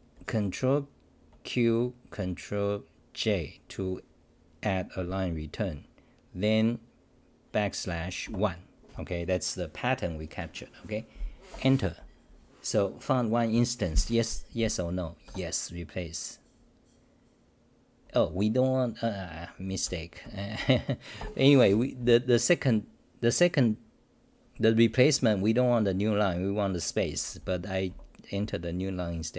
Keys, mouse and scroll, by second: 1.6 ctrl+q, 11.5 Return, 21.2 ctrl+g, 22.0 c, 24.2 c.